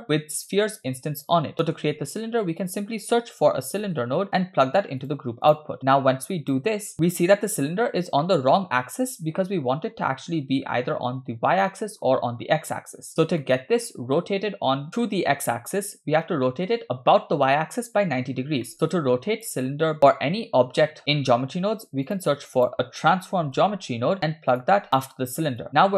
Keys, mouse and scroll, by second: 1.5 middle click, 2.0 shift+a, 5.9-6.6 drag, 7.1-7.7 shift+middle drag, 7.9 scroll down 2, 8.2-8.7 middle drag, 11.7-12.0 middle drag, 13.4-13.9 middle drag, 14.9 middle click, 16.3-16.7 middle drag, 18.4 scroll down 1, 18.7 middle click, 19.0 click, 19.9 middle click, 21.5 shift+a, 25.6 click.